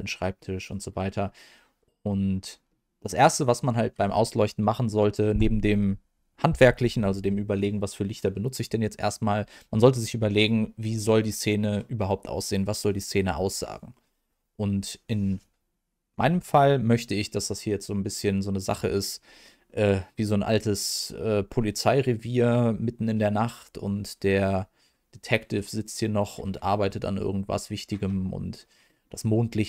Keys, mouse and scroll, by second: 0.3 middle click, 1.5-1.9 scroll down 1, 1.9 scroll up 1, 2.6 middle click, 28.8-29.6 middle drag.